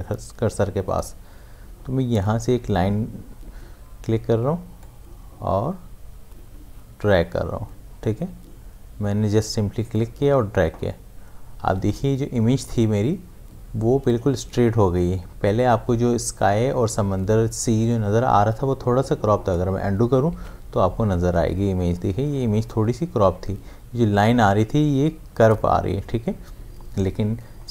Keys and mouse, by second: 4.8-12.3 drag, 20.3 ctrl+z.